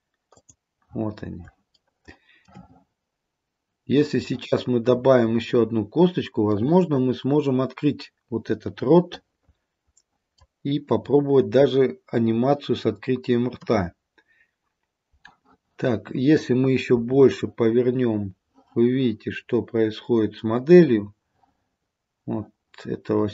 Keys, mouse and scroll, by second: 1.1-1.5 scroll up 3, 1.9 shift+middle click, 6.6 middle click, 6.6 scroll up 1, 11.0-12.9 scroll down 3, 13.7 KP_3, 17.1 r.